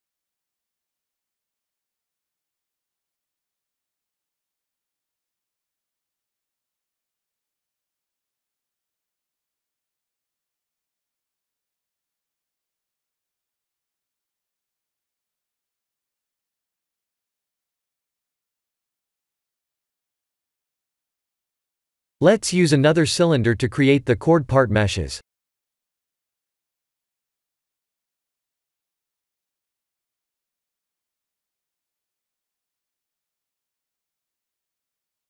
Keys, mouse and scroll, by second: 0.7 Tab, 1.4 alt+click, 1.8 ctrl+b, 3.8 Tab, 5.3 Tab, 6.1 alt+click, 6.9 ctrl+b, 8.4 Tab, 9.3 middle click, 9.5 middle click, 9.6 middle click, 9.7 middle click, 10.1-11.0 scroll down 9, 10.8 middle click, 11.0 middle click, 11.1 middle click, 11.6-12.5 scroll down 2, 12.5 middle click, 13.7-14.2 scroll up 7, 14.2 Tab, 16.4 middle click, 16.5 middle click, 17.2 middle click, 17.7 middle click, 17.8 middle click, 18.6 middle click, 18.6 KP_1, 19.5 click, 23.0-23.6 scroll down 3, 23.6 scroll down 1, 24.0 shift+a, 26.2-27.1 scroll down 4, 27.2 r, 29.3 ctrl+z, 29.9 s, 31.9 r, 34.4 g.